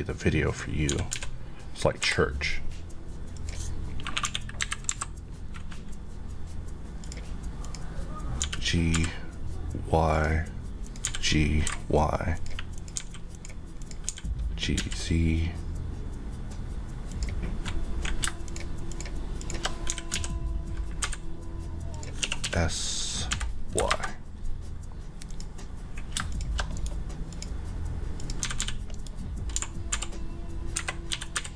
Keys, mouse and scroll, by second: 0.9 typing, 2.0 typing, 3.3 click, 4.2 KP_1, 4.6 KP_3, 4.9 KP_Decimal, 7.0 click, 8.4 g, 10.1 click, 11.0-11.6 typing, 12.3 click, 12.9 typing, 13.3 click, 14.1 click, 14.1-14.7 typing, 17.1 click, 18.9 click, 18.9 shift+Left, 19.9 typing, 21.9 click, 22.2-23.7 typing, 23.9 Return, 25.2 click, 26.7 right click, 27.3 click, 28.2 click, 28.4-29.9 typing, 28.9 right click, 30.7 Escape, 31.1 g.